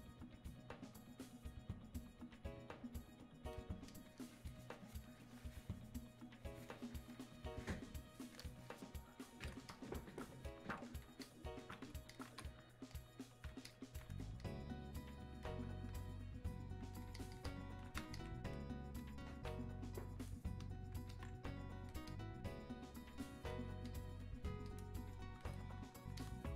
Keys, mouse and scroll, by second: 2.4-6.8 drag, 9.5-21.1 drag, 21.1-26.2 alt+drag.